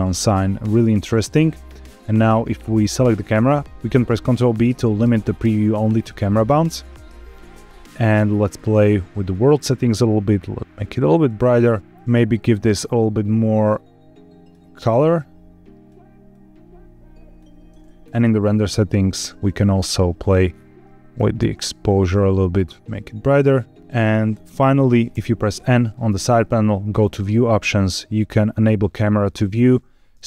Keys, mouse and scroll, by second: 1.1-2.5 scroll down 2, 2.5 click, 2.9 scroll down 3, 3.6 ctrl+z, 3.6 ctrl+b, 5.0 ctrl+b, 7.0 scroll up 1, 8.4 click, 9.1 click, 11.9 ctrl+z, 11.9 click, 18.0 click, 18.3-20.1 scroll down 4, 20.1 click, 20.4-21.0 scroll down 2, 21.4 shift+click, 23.8 click, 23.8-24.8 scroll up 2, 25.0 n, 26.8 click, 29.3 click.